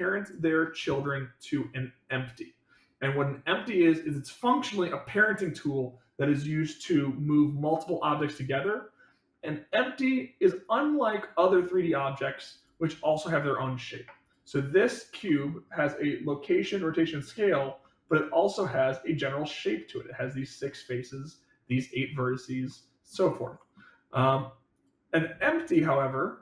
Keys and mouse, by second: 10.5 click, 12.4 click, 15.2-15.5 middle drag, 17.7-18.5 middle drag, 21.6-22.3 middle drag, 22.6-23.1 middle drag, 23.5 middle click, 24.7-25.4 drag, 25.6-26.4 drag.